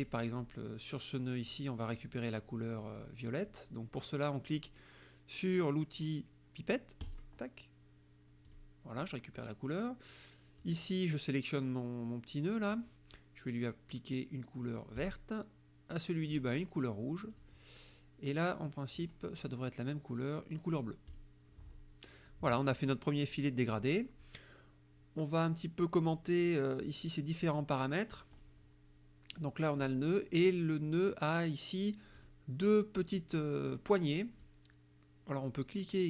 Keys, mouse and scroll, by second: 0.1 click, 7.1 click, 8.5 click, 10.6 click, 15.0 click, 16.3 click, 17.4 click, 19.0 click, 21.1 click, 28.3 click, 29.9 click, 32.2 click, 33.2 click, 34.5-36.0 drag.